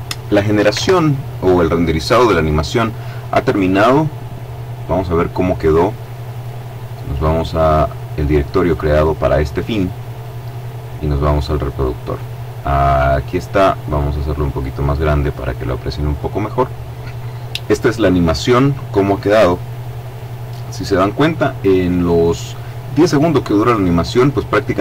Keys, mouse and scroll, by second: 1.0 alt+Tab, 4.5 click, 6.3 click, 7.5 click, 10.2 click, 14.1 click, 16.6 click.